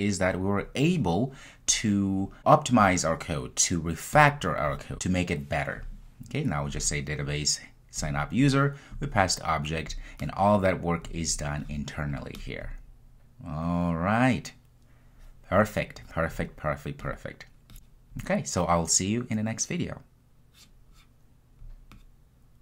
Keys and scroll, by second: 21.8 super+F2.